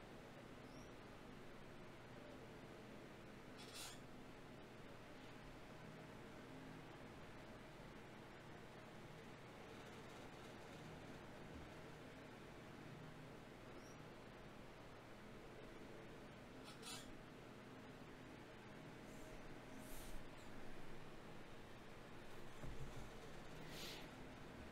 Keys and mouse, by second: 0.8-3.6 drag, 1.8 Tab, 3.6 ctrl+Tab, 5.2-6.5 drag, 11.9 e, 13.1 ctrl+z, 14.3-16.1 drag, 15.7 e, 17.9-21.9 drag, 21.9 d, 22.1-23.9 drag, 24.3 shift+q.